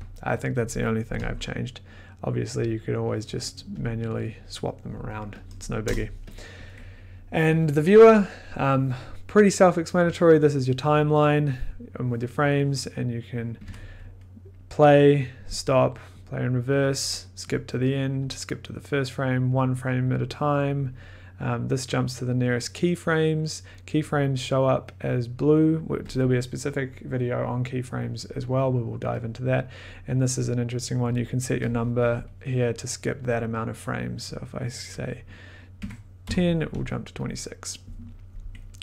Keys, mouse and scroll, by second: 2.7 click, 3.2 click, 3.8 click, 4.4 click, 5.4 click, 5.8 click, 5.8 BackSpace, 6.3 click, 7.3 scroll, 13.6 click, 13.6 1, 14.5 click, 15.5 click, 16.2 click, 16.8 click, 17.5 click, 18.3 click, 19.6 click, 19.8 click, 20.0 click, 20.1 click, 20.4-20.8 click, 20.6 click, 20.7 click, 26.1 click, 30.7 click, 31.9 5, 32.8 click, 33.2 click, 34.2 click, 35.2 click, 35.8-36.2 typing, 37.2 click.